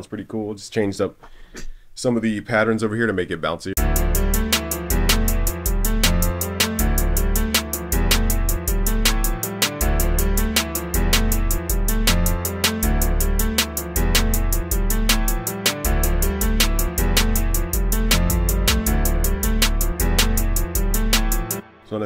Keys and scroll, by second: 9.0 super+s, 9.4 super+n.